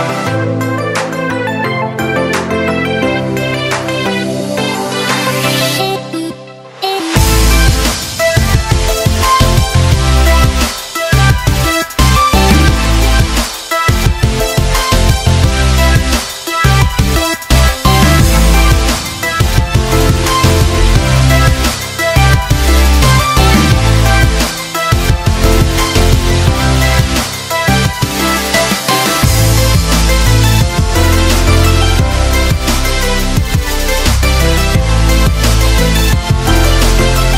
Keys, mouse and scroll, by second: 22.1 alt+scroll up 1, 22.8 alt+scroll up 1, 23.6-25.0 drag, 25.1 alt+scroll down 1, 26.8 alt+scroll up 1, 29.2-31.7 drag, 33.6-34.2 click, 36.0-37.3 drag.